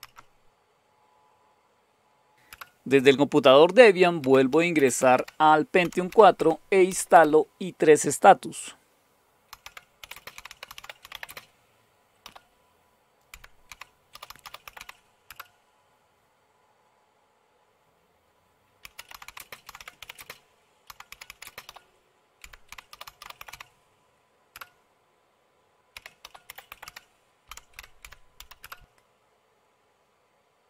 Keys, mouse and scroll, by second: 0.0-0.6 scroll up 2, 2.5 Return, 3.9-7.3 typing, 9.2-16.1 typing, 15.2 Return, 18.5-24.0 typing, 24.5 Return, 25.7-28.8 typing.